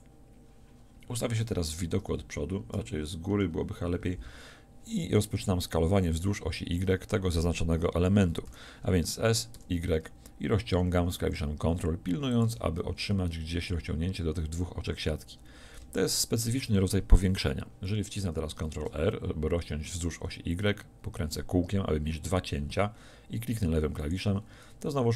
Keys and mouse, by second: 2.0 KP_1, 3.3 KP_7, 8.5 s, 12.4-15.4 drag, 15.4 middle click, 16.0-18.5 drag, 18.5 ctrl+r.